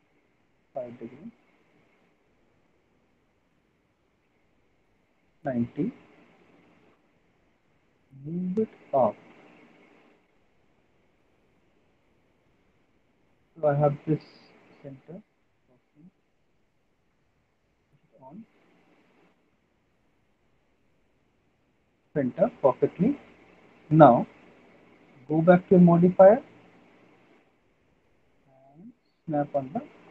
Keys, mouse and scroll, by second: 0.9 right click, 1.1 click, 5.5 click, 6.7 click, 6.7 alt+middle click, 7.1 w, 9.7 click, 10.8 alt+middle click, 11.2 middle click, 11.6 alt+middle click, 12.2 middle click, 12.5 middle click, 12.7 alt+middle click, 13.5 alt+middle click, 14.9 click, 16.1 click, 17.8 click, 20.6 click, 21.2 middle click, 22.3 middle click, 22.5 middle click, 23.6 middle click, 23.9 alt+middle click, 24.3 middle click, 25.3 click, 26.0 middle click, 26.2 middle click, 27.0 alt+middle click, 28.0 alt+middle click, 28.4 alt+middle click.